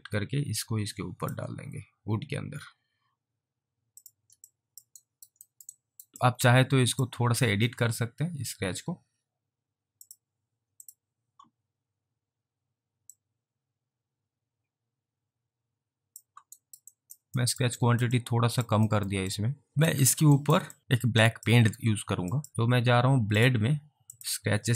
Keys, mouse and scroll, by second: 4.0 click, 4.6 alt+click, 5.1 alt+right click, 5.5 alt+middle click, 5.8 alt+right click, 6.3 alt+click, 10.1 click, 13.3 click, 16.7 alt+right click, 17.0 alt+click, 17.5 alt+middle click, 17.9 alt+right click, 18.2 alt+click, 18.9 alt+middle click, 19.4 alt+click, 19.7 alt+right click, 19.8 alt+click, 20.2 alt+middle click, 20.5 alt+double right click, 20.8 alt+click, 21.3 alt+click, 22.4 alt+click, 22.5 alt+click, 23.3 alt+click.